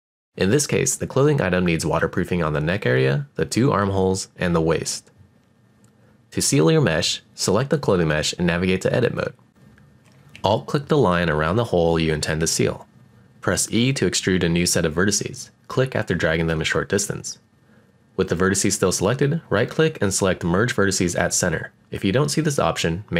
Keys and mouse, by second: 3.9 click, 5.3 click, 5.7 click, 7.1 click, 8.7 Tab, 9.6-10.2 drag, 12.5 shift+middle click, 14.6 alt+click, 14.9 e, 16.2 click, 17.4-20.0 right drag, 20.8 g, 22.4 click, 22.7-23.1 middle drag.